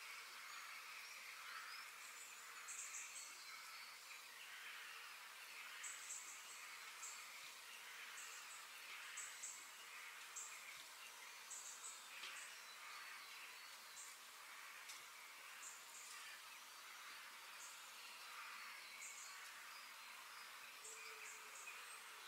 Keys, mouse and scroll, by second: 0.0 scroll down 2, 0.2 middle click, 0.8-1.4 scroll down 1, 1.4-3.5 shift+middle drag, 3.8 click, 4.4 shift+click, 5.0-6.0 middle drag, 6.0 KP_7, 6.3 KP_3, 6.8-7.2 scroll up 1, 7.2-8.6 shift+middle drag, 8.6 KP_3, 11.0 click, 11.8 g, 14.1 g, 15.9 click, 16.6 shift+click, 17.6 shift+d, 20.6-22.0 shift+middle drag, 22.0 ctrl+z.